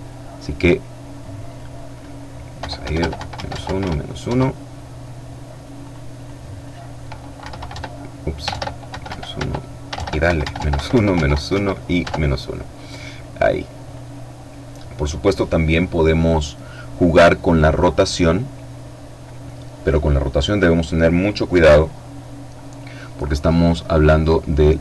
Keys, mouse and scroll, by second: 0.5 click, 1.7 KP_Subtract, 1.9 KP_1, 2.1 Tab, 2.2 KP_Subtract, 2.4 KP_1, 2.5 Tab, 2.7 KP_Subtract, 2.9 KP_1, 3.3 Tab, 4.9 click, 6.5 KP_Subtract, 6.7 Tab, 7.5 shift+Tab, 7.9 shift+KP_Subtract, 8.1 shift+KP_4, 8.4 shift+Tab, 9.3 KP_Subtract, 9.5 KP_1, 9.6 Tab, 9.8 KP_Subtract, 10.0 KP_1, 10.2 Tab, 10.3 KP_Subtract, 10.6 KP_1, 11.1 Tab, 12.5-13.5 drag, 20.5 F12.